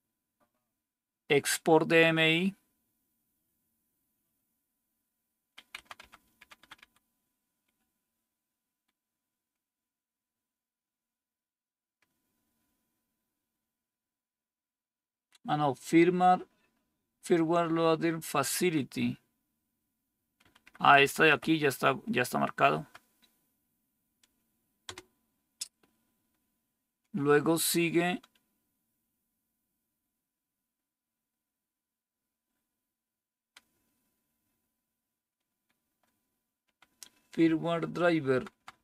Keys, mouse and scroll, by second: 5.7 Down, 5.9 Down, 6.1 Down, 6.3 Down, 6.4 Down, 6.7 Down, 20.3 Up, 20.7 Up, 20.9 Up, 21.2 Up, 22.6 Right, 24.8 Return, 36.5 Down, 38.2 Down, 38.5 Down, 38.6 Down.